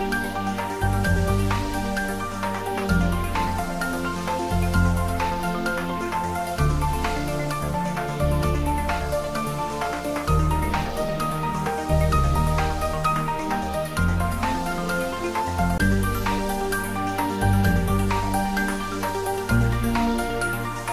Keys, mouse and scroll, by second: 0.0 click, 0.7 scroll up 1, 1.9-2.5 typing, 5.2 click, 6.3-10.2 middle drag, 10.2 s, 11.2 y, 13.1 click, 13.6 ctrl+z, 14.0 middle click, 15.2 e, 18.1 click, 18.7 Tab, 19.2 scroll up 1, 19.6-20.9 middle drag.